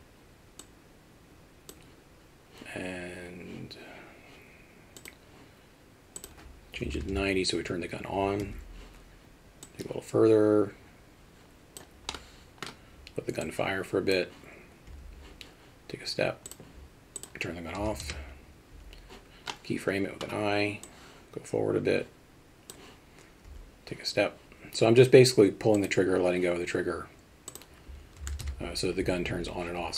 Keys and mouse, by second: 6.4-12.3 drag, 12.3 middle click, 13.5-14.2 drag, 17.3-19.2 drag, 19.7 middle click, 20.9-22.8 drag, 25.8 click, 27.7-29.2 drag.